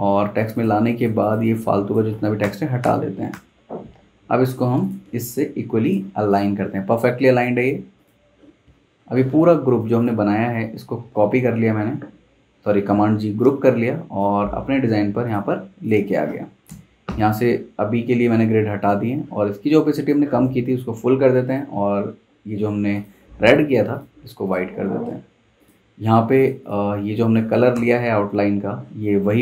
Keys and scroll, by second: 2.4 BackSpace, 2.8 BackSpace, 3.3 BackSpace, 3.6 Escape, 11.0 super+g, 16.6 super+', 27.1 z, 27.7 v.